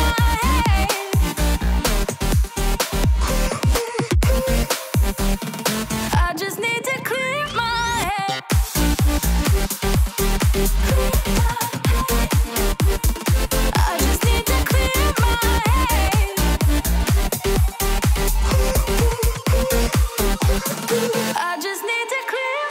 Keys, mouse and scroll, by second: 3.3 alt+click, 11.6 ctrl+t.